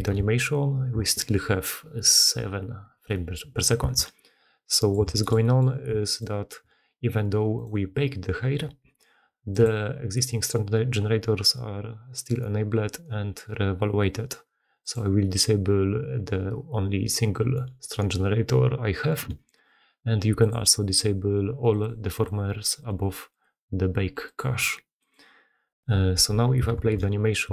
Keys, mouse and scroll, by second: 0.0 shift+space, 3.7 shift+space, 4.6 click, 4.8 drag, 24.9 click, 26.7 shift+space.